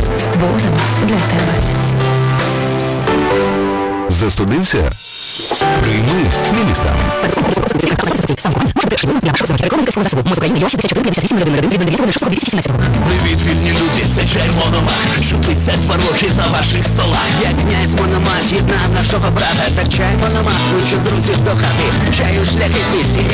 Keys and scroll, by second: 0.3 Up, 0.3 Return, 12.7 Page_Down.